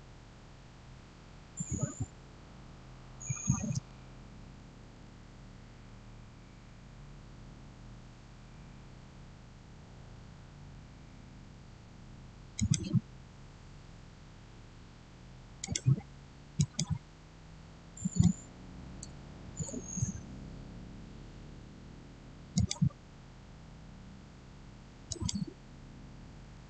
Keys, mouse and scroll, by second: 4.5-5.3 typing, 4.7 click, 8.2 Return, 12.4 click, 15.5 click, 18.4-19.4 typing, 20.5-21.7 scroll down 1, 22.4 click, 24.9 click.